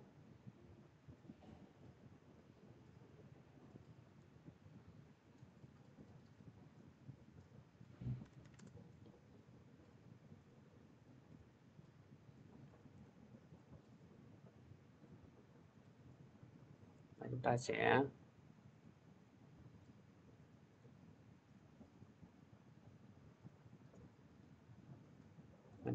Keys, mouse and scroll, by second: 0.3-6.5 drag, 7.2 click, 7.8-8.7 typing, 10.9 click, 12.5 click, 12.8 typing, 13.4 click, 20.5 click, 24.5 click, 25.5 click.